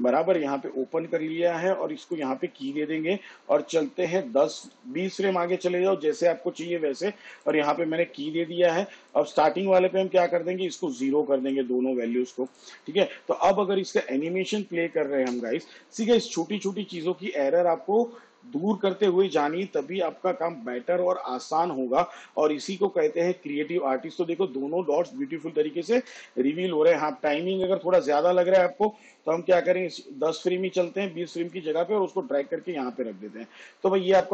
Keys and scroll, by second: 0.6 Caps_Lock, 4.2 shift+Page_Down, 15.7 space, 26.5 space, 29.9 shift+Page_Down.